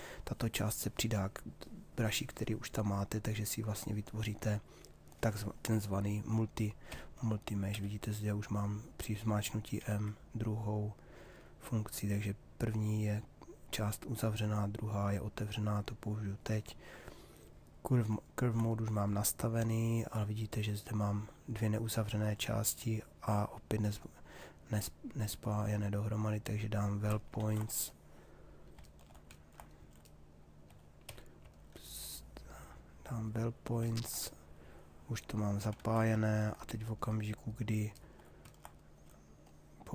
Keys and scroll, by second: 6.4 m, 26.9 ctrl+z, 31.1 f, 35.3 ctrl+z.